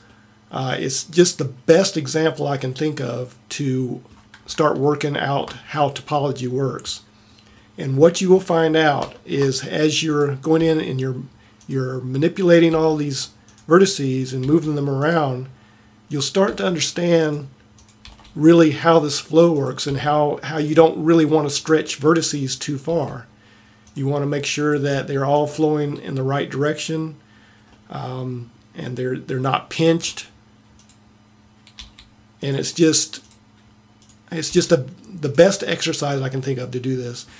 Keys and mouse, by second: 2.7-3.9 middle drag, 10.2-11.4 drag, 10.7 g, 12.8 g, 14.4 g, 16.5 g, 18.2 g, 19.9 g, 22.9 g, 24.7-26.5 drag, 24.9 g, 27.7-30.4 middle drag, 31.8 g, 34.5 g.